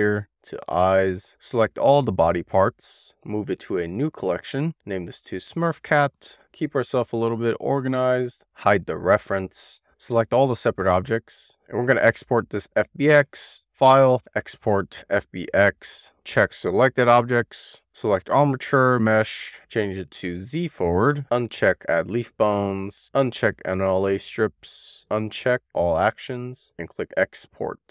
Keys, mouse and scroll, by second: 1.9 shift+click, 3.4 m, 8.3 click, 9.1 click, 10.1 click, 10.5 a, 13.8-16.1 drag.